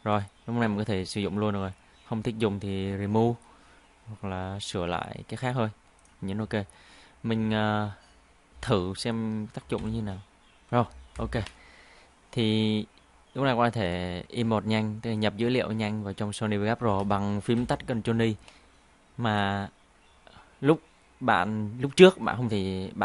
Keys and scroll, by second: 9.8 ctrl+i, 17.6 ctrl+i.